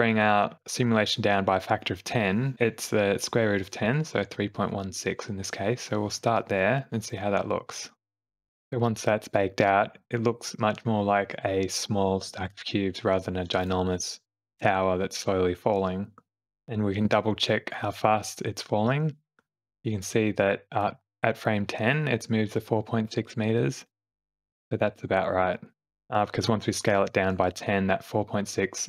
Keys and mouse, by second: 2.0-5.0 drag, 8.7 click, 9.3 space, 12.3 space, 12.5 shift+Left, 15.4 click, 19.0-25.4 drag, 25.9 Left, 25.9 Right, 26.3 Right, 26.8 Left.